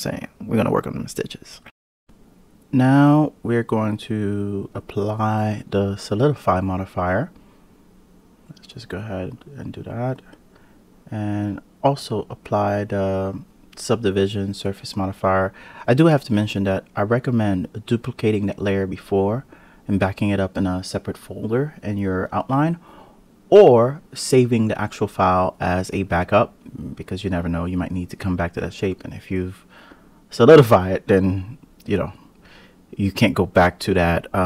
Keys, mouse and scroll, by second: 0.5-1.5 scroll down 3, 1.5 click, 1.6-2.0 drag, 4.4 click, 8.1-10.7 drag, 11.1-13.2 drag, 13.2 Tab, 14.8 1, 15.4 click, 17.4 1, 18.1 click, 20.3 Tab, 20.7 click, 22.4 click, 23.4 KP_Divide, 24.8 click, 29.4 Tab, 31.2 click, 32.1 click, 33.4 click.